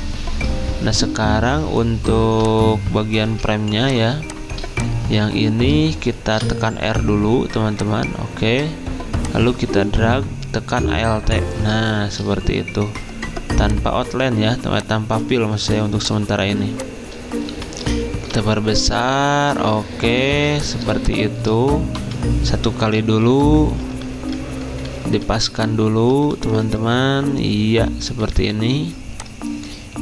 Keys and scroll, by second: 16.5 v, 20.3 z, 22.0 v, 23.4 Up, 24.0 Left, 24.3 Up, 24.9 Up, 25.7 Left, 29.1 typing.